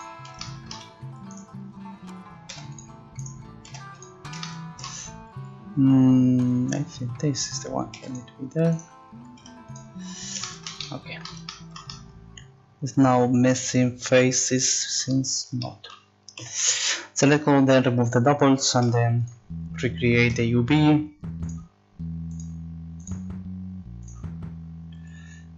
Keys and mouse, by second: 2.5 g, 3.7 g, 7.8 click, 8.0 g, 9.4 g, 13.9 middle click, 14.5 middle click, 16.4 a, 16.6 a, 18.0 click, 18.8 u, 21.4-22.6 drag, 24.7 click.